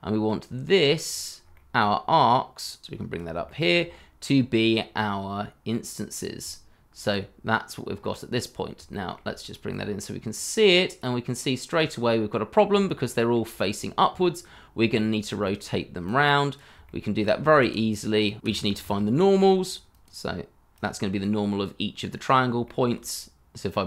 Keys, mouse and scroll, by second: 0.0 scroll down 1, 0.7 scroll up 1, 1.0 shift+middle click, 1.9 scroll up 1, 3.2 Delete, 3.8 shift+middle click, 4.0 scroll up 1, 7.2 scroll up 1, 8.3-8.7 scroll down 1, 8.9 shift+middle click, 11.7-12.7 scroll down 1, 12.9 shift+middle click, 13.1-14.0 shift+scroll down 1, 14.2 scroll up 1, 15.1 scroll down 1, 15.4 shift+middle click, 16.8 shift+middle click, 17.6 middle click, 17.6-19.3 typing, 21.6 shift+middle click.